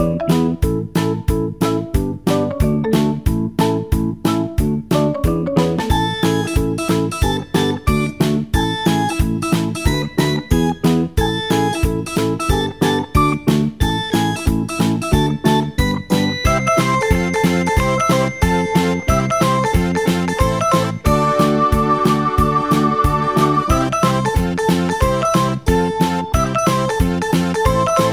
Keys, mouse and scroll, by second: 1.7 click, 2.6-5.6 drag, 6.1 shift+a, 8.9 g, 11.7 g, 14.3 s, 15.7 g, 19.1-20.7 middle drag, 20.7 click, 21.5-24.5 middle drag.